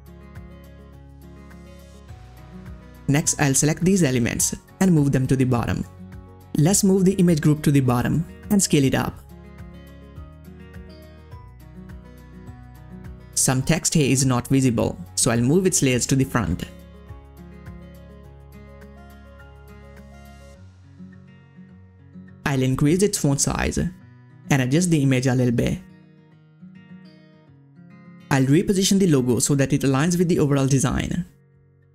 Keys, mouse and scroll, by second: 1.5 click, 1.5 click, 1.7-2.2 scroll down 2, 2.5-3.6 ctrl+scroll up 2, 3.9 scroll up 1, 4.0-6.1 drag, 6.1-13.0 drag, 13.0 scroll up 1, 13.6 scroll down 1, 14.6 click, 15.9 right click, 17.3 click, 18.2 scroll up 1, 19.3-22.9 drag, 23.3-28.0 drag, 28.7 click, 28.7 click, 29.5 ctrl+scroll up 1, 30.1 scroll up 1, 30.2 click, 31.0 ctrl+scroll down 1.